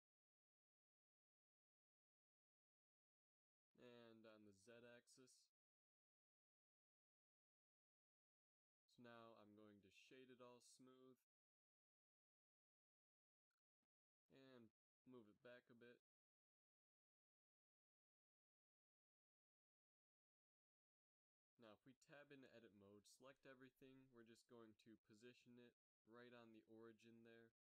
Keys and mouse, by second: 0.7 ctrl+r, 2.0 s, 5.1 ctrl+r, 6.7 s, 10.5 Tab, 11.3 space, 13.9 a, 15.5-16.9 drag, 15.7 g, 16.5 g, 18.9-19.9 middle drag, 22.0 KP_3, 24.6 Tab, 25.0 a, 25.1 a, 26.1 g.